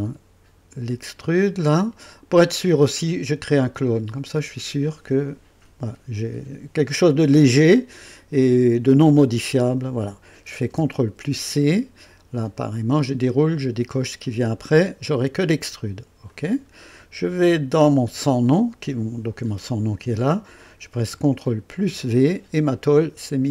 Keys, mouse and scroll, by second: 1.0 click, 4.1 click, 11.2 ctrl+c, 12.5 click, 14.0 click, 16.3 click, 18.1 click, 21.7 ctrl+v, 22.7-23.5 drag.